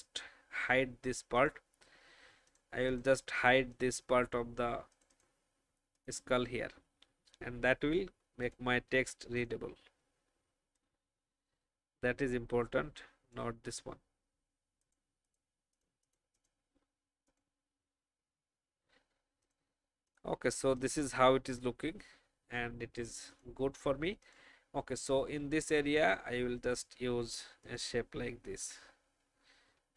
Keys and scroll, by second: 17.8 v.